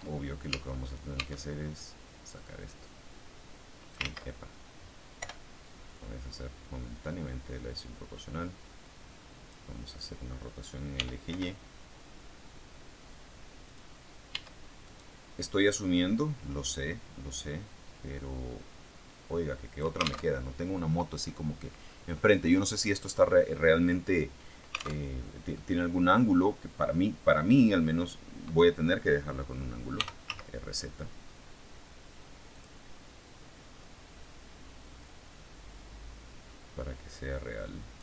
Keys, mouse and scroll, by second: 0.8 right click, 1.2 Tab, 2.5-4.0 drag, 4.0 ctrl+z, 5.1 o, 5.8-9.6 drag, 10.8 r, 13.6 click, 14.2 Tab, 14.8 right click, 15.6-19.9 drag, 20.2 alt+Tab, 25.0 alt+Tab, 25.4 click, 25.8-27.4 middle drag, 27.7-28.4 scroll down 2, 29.8 r, 30.2 z, 32.4 click, 33.7-38.0 drag.